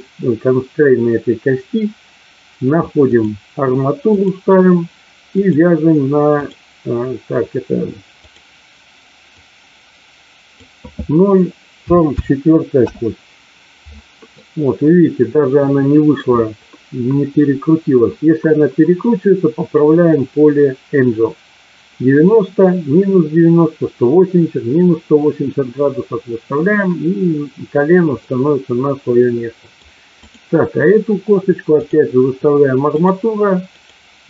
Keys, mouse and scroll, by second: 3.0 click, 5.3 click, 8.2 click, 11.9 KP_4, 14.4-16.2 middle drag, 28.2-29.7 middle drag, 30.0 click, 31.8 click, 33.8 click.